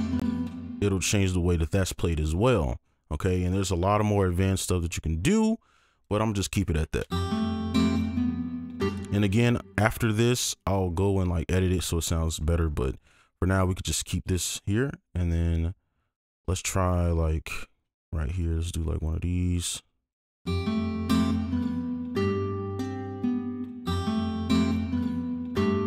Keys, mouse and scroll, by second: 2.5-3.3 alt+scroll down 1, 6.0 ctrl+click, 6.6-7.0 alt+scroll down 1, 7.0 space, 8.8 space, 10.4 right click, 15.6-16.1 scroll down 1, 16.1 ctrl+click, 19.4 alt+click, 20.4 space, 20.7 ctrl+click, 21.3 ctrl+click, 23.6 space, 23.8 space, 24.2 ctrl+click.